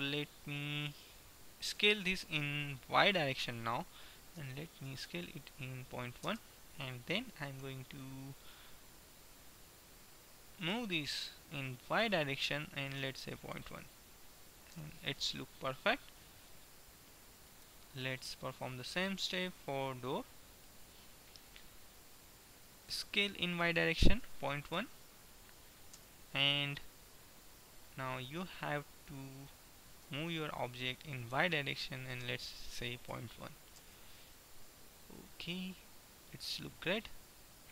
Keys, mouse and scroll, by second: 1.9 s, 7.4-10.5 middle drag, 10.7 g, 16.5 middle click, 18.7 right click, 19.4-20.5 middle drag, 23.0 s, 30.0 g, 35.0-36.2 middle drag.